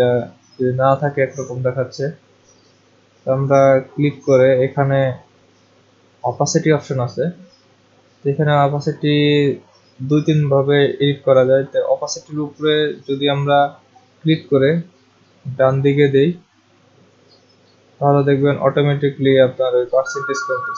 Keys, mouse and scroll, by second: 1.5 click, 3.4 click.